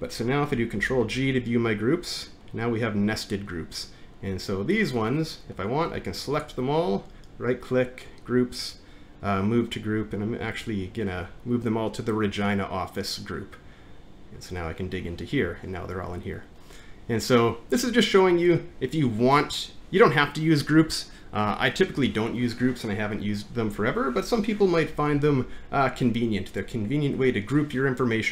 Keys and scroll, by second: 0.8 ctrl+g, 25.1 alt+`.